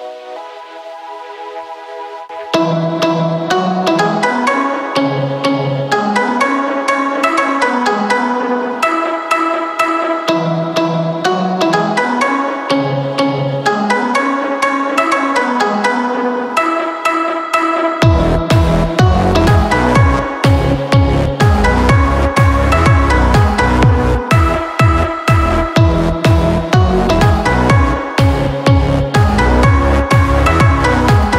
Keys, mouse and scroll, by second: 3.1 click, 3.2-5.5 drag, 7.2 ctrl+shift+a, 10.9-12.7 drag, 12.7 k, 19.3-20.4 typing, 22.4-31.3 drag.